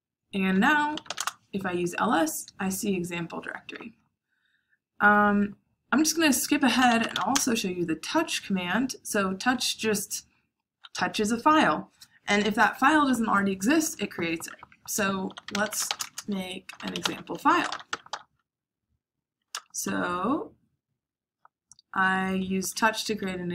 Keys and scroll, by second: 0.6-1.5 typing, 6.3-8.7 typing, 14.9-18.5 typing, 19.4 Return.